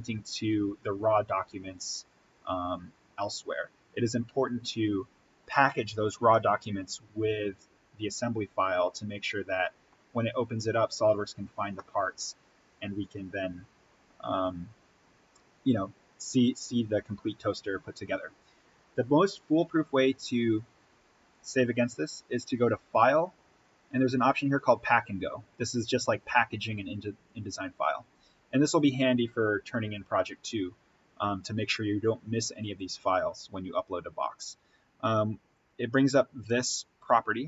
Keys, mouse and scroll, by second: 6.2-10.1 middle drag, 10.1-10.7 scroll down 1, 11.6-13.0 middle drag, 13.0-15.6 scroll down 1, 19.2 scroll up 1, 21.2 click, 27.2 click, 35.8-37.4 drag.